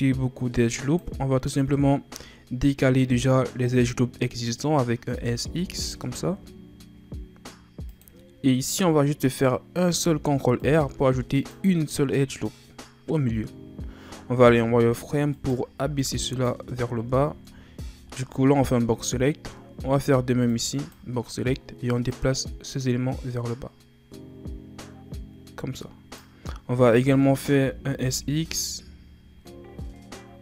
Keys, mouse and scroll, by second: 1.6 shift+scroll up 5, 5.2 s, 9.9 ctrl+r, 14.4 z, 15.3 right click, 15.8 b, 18.1-18.9 shift+scroll up 2, 20.1 b, 22.0-25.1 drag, 26.6 a, 26.9 a, 27.6 s.